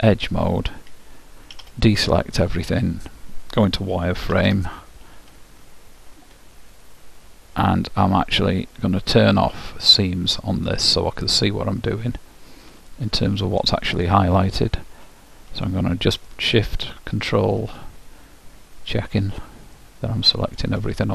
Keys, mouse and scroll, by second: 0.1-2.1 drag, 1.7 a, 2.4-5.0 middle drag, 4.5 z, 10.0-11.8 drag, 13.0-14.9 ctrl+right drag, 15.8-17.7 right drag, 19.9-21.1 middle drag.